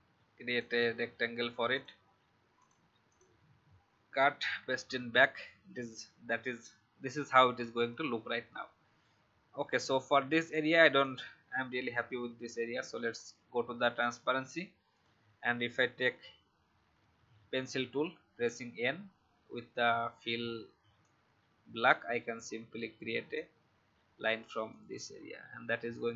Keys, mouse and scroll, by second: 3.9 ctrl+x, 5.0 ctrl+x, 7.7 click, 9.5 alt+scroll up 1, 11.0 click, 16.9 n, 20.9-26.1 drag.